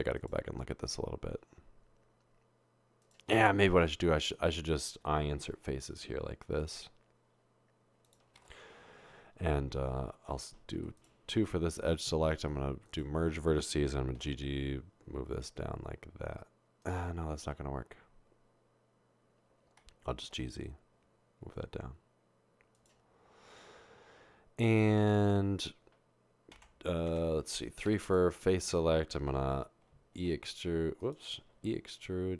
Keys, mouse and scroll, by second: 8.9 i, 14.2 typing, 20.4 typing, 26.7 Tab, 27.1-27.9 typing, 30.1 typing, 31.5 typing.